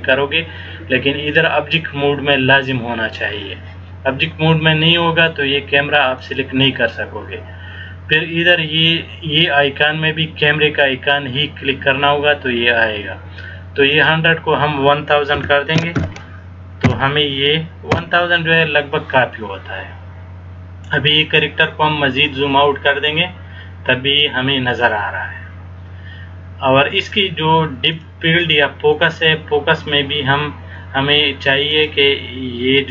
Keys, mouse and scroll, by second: 6.3 click, 14.1 click, 16.1 KP_0, 21.4 scroll down 1, 21.7 scroll up 2, 22.4-23.4 scroll up 4, 24.2-25.1 scroll up 1, 28.1 click, 29.2 click, 31.9 click.